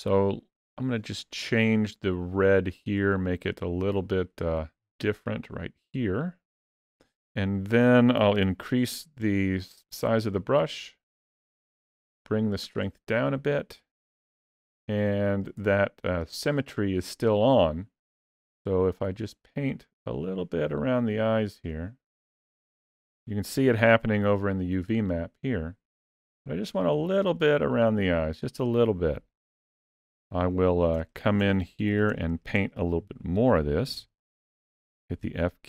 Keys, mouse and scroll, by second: 0.4 middle click, 2.2 click, 8.2 f, 12.1 click, 14.4 ctrl+middle click, 15.6 shift+middle click, 19.1 click, 19.7 click, 20.3 click, 20.9 click, 21.6 click, 22.1 click, 22.5 click, 23.0 click, 26.6 middle click, 30.0 ctrl+middle click, 30.9 shift+middle click, 31.5 ctrl+middle click, 32.0 shift+middle click, 33.7 f.